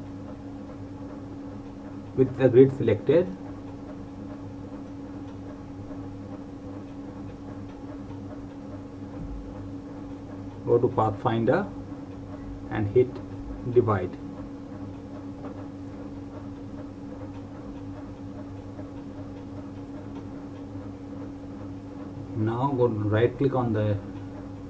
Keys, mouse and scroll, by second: 3.6 click, 6.6 click, 11.4 click, 17.5 click, 20.7 right click, 22.3 click, 24.1 right click.